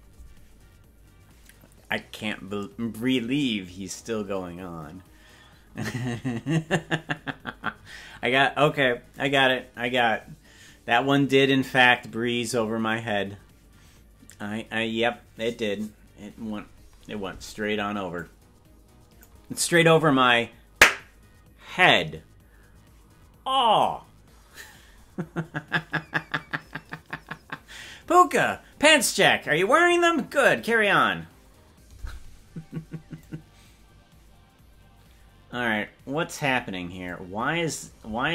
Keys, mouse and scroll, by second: 18.2-19.3 drag, 33.3-36.5 drag, 37.1 click, 38.1 space.